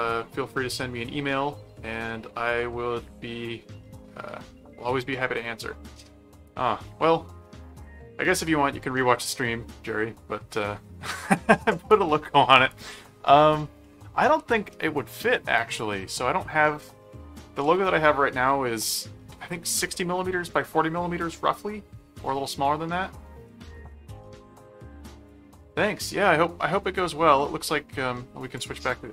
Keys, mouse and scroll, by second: 13.8-14.9 middle drag, 15.7 click, 16.1-17.6 middle drag, 28.5 click.